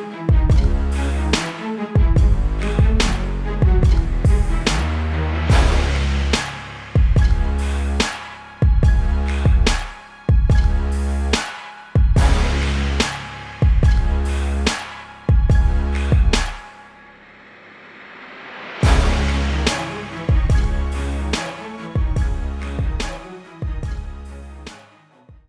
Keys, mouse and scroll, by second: 2.5 click, 5.6 click, 15.8 click.